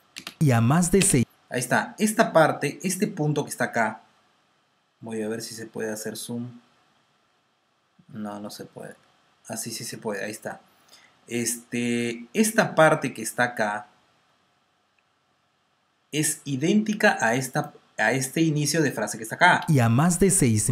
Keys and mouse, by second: 0.0 click, 0.4 space, 1.1 space, 2.8 click, 3.4 click, 3.4 space, 4.0 space, 5.0 click, 5.0 space, 15.3 r, 17.4 click, 19.8 space.